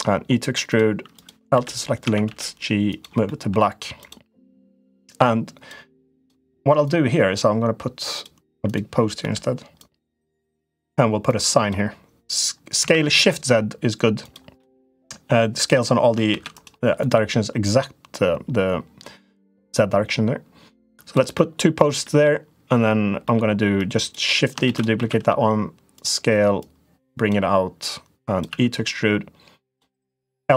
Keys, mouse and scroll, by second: 0.9 click, 1.3 l, 1.8 a, 2.0 g, 3.0 middle click, 3.7 click, 4.7 click, 6.6-8.0 drag, 8.9 l, 9.5 click, 11.1 click, 12.6 s, 14.0 s, 14.4 middle click, 16.0 shift+d, 17.5-20.9 drag, 21.2 middle click, 21.9 middle click, 23.1 middle click, 24.4 shift+d, 24.7 s, 26.4 click, 27.6 click, 28.3 e, 29.8 click, 30.3 l.